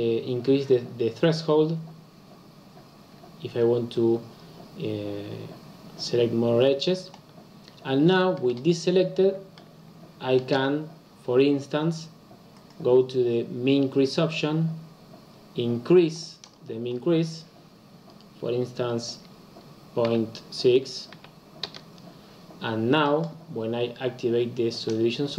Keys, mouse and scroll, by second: 8.4-21.7 middle drag, 21.7 click.